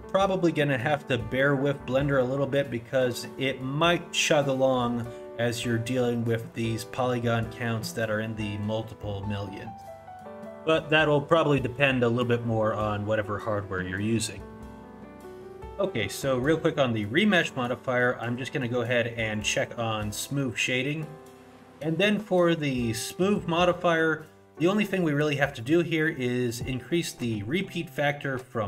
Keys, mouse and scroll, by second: 4.9-8.1 scroll down 1, 17.4 click, 25.7 click.